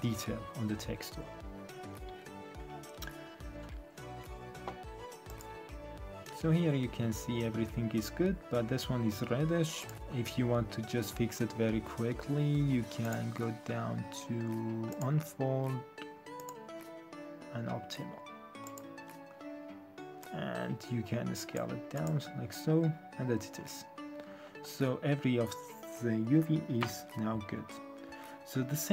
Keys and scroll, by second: 2.0 F8, 3.4 F8, 26.7 F8.